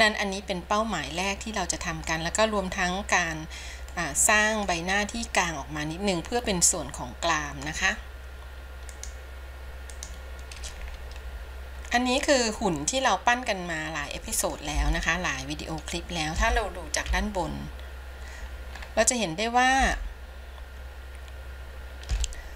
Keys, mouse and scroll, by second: 0.0 KP_1, 1.3-10.1 middle drag, 11.2-11.5 scroll down 4, 11.9-12.4 scroll down 1, 12.7-13.1 scroll down 1, 13.1-15.3 middle drag, 15.3-16.8 shift+middle drag, 17.5 KP_7, 19.3 scroll up 2, 20.5-22.5 shift+middle drag.